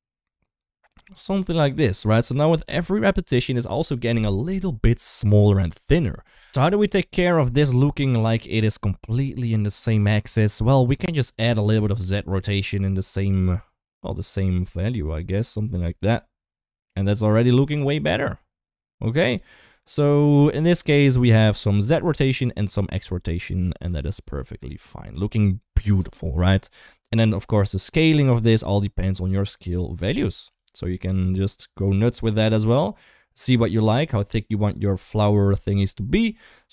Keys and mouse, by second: 1.3-1.9 middle drag, 2.7-3.3 middle drag, 7.2 middle click, 8.2 middle click, 10.8 middle click, 11.6 shift+middle drag, 12.5-15.3 drag, 15.6-16.6 middle drag, 17.7-19.3 drag, 19.5-20.1 middle drag, 20.4 shift+middle drag, 20.7-23.2 middle drag, 23.5 shift+middle drag, 23.8-24.1 middle drag, 24.6-24.9 middle drag, 25.9 middle click, 29.3 shift+click, 30.6-33.3 drag, 33.6-35.0 shift+drag, 35.3-36.6 middle drag.